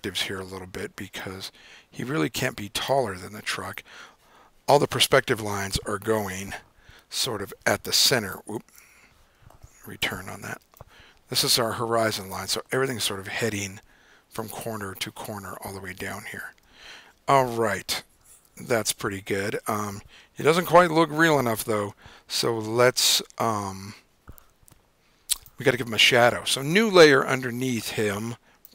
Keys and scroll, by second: 6.6 super+b, 6.8 super+r, 8.6 super+z, 10.0 Return, 16.2 super+z, 18.3 super+;, 20.7 super+=, 21.9 super+-.